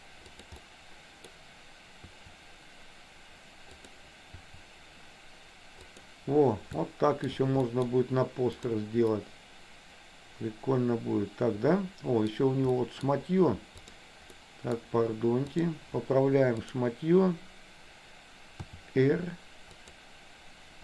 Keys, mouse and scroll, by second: 0.7 middle click, 2.2 r, 4.4 r, 6.9 shift+middle click, 7.7 middle click, 8.7 click, 9.2-12.4 middle drag, 12.9 middle click, 14.4 middle click, 15.6 click, 16.8 click, 18.8 r.